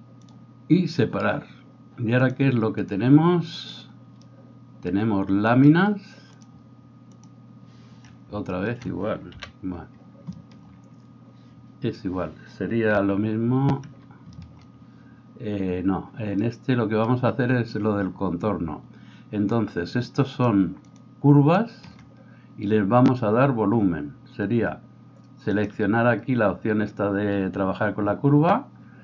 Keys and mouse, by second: 3.5 middle click, 4.2-29.0 drag, 9.3 KP_1, 13.0 f.